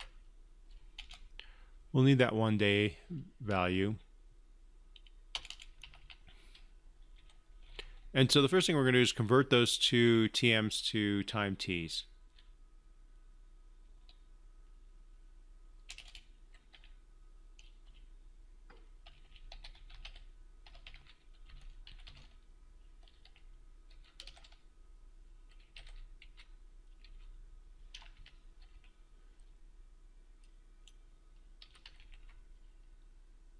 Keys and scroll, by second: 0.7 ctrl+v, 32.3 ctrl+c, 32.4 ctrl+v.